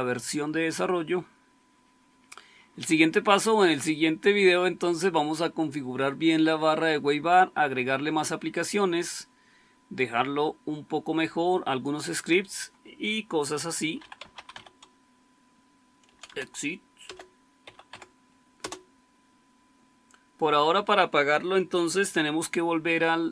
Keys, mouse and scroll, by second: 13.7-14.9 typing, 16.0-17.8 typing, 18.5 Return.